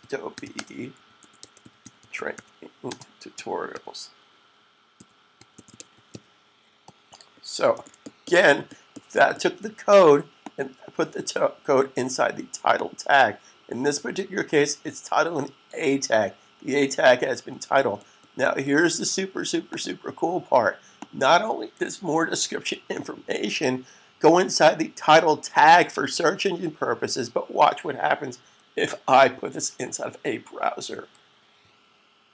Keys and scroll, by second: 0.0-3.5 typing, 4.6-5.9 typing, 7.4 s, 22.5 super+s, 30.4 super+fn+F12.